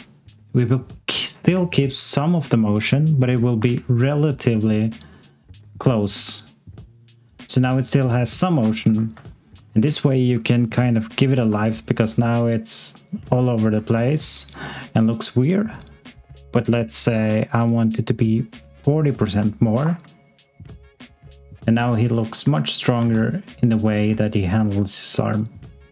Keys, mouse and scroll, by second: 0.0 alt+click, 3.5 click, 9.1 ctrl+z, 11.3 z, 16.0 click, 19.5 alt+click, 19.8 click, 22.1-22.4 scroll down 1, 22.6 alt+click, 22.9 click, 23.5 click, 24.2 alt+click.